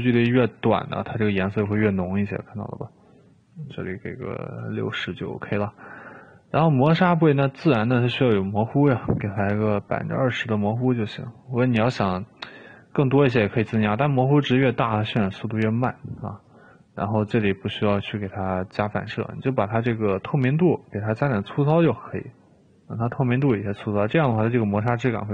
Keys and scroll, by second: 1.8 1, 4.8 7, 8.9-9.4 typing, 9.6 Return, 11.3 typing, 16.0 typing.